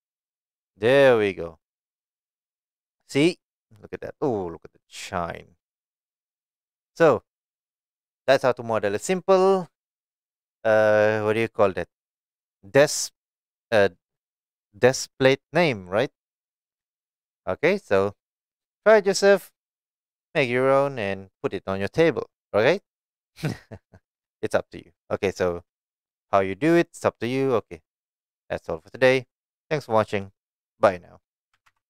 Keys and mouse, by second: 0.0 click, 1.8-6.5 middle drag.